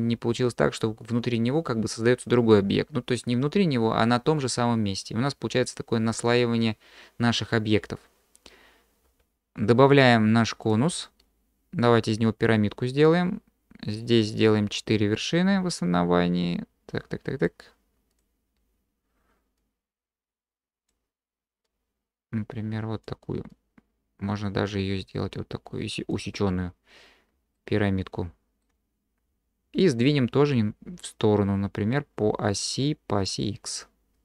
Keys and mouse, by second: 9.1 q, 13.2-17.5 drag, 18.1 click, 19.6-20.9 drag, 21.8-23.1 drag, 23.5-26.1 drag, 27.5-28.6 drag, 34.1-34.2 drag.